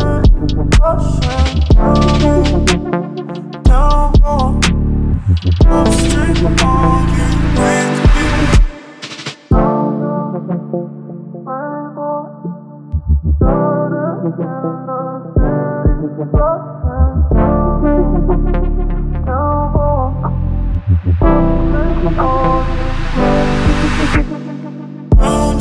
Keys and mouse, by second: 0.6 shift+middle click, 5.3 middle click, 6.3 middle click, 6.9 Tab, 7.5 ctrl+middle drag, 7.8 shift+middle drag, 8.2-8.9 middle drag, 11.5 shift+a, 14.6-16.3 drag, 17.5 y, 18.1 r, 19.2 Return, 20.2 KP_1, 20.7 g, 20.9 z, 21.8 click, 22.1 shift+z, 22.8 ctrl+middle drag, 23.2 shift+middle click, 25.4 click.